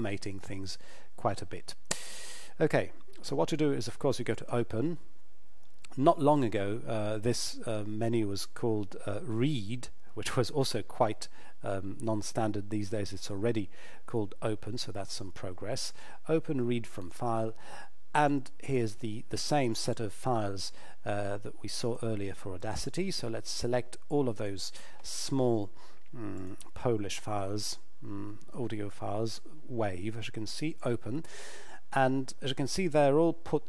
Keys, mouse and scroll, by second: 4.3 click, 16.8 click, 26.4 click, 30.8 click.